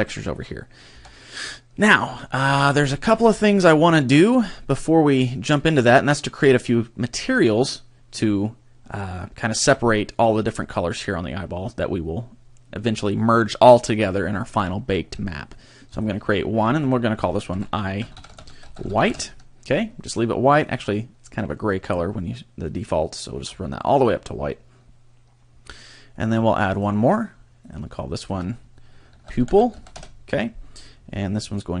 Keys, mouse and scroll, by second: 0.9 Tab, 1.4 middle click, 2.1 shift+middle click, 2.5-2.9 scroll up 2, 2.9 shift+middle click, 3.3 middle click, 5.6 click, 15.9 click, 16.9 click, 20.6 click, 26.7 click, 27.6 click, 28.3 click.